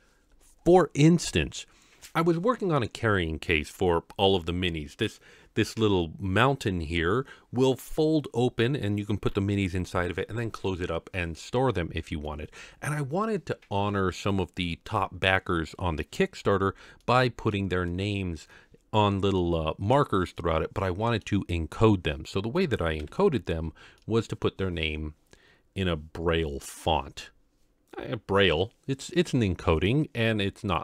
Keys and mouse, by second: 12.3-12.6 middle drag, 17.0-17.5 middle drag, 17.9-18.4 middle drag, 19.0-19.4 middle drag, 20.4-21.2 middle drag, 23.0 KP_Decimal, 24.0-24.5 middle drag.